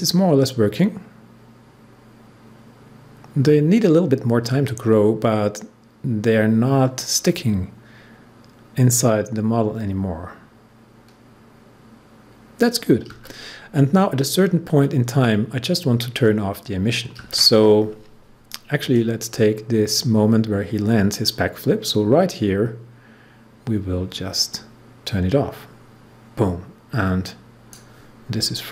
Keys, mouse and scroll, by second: 18.8-28.7 drag.